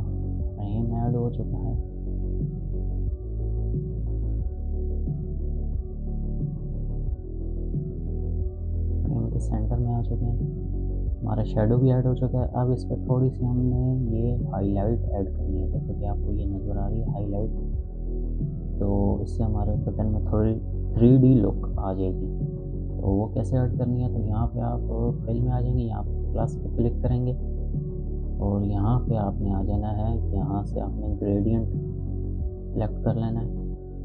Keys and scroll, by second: 1.7 space, 11.7 space.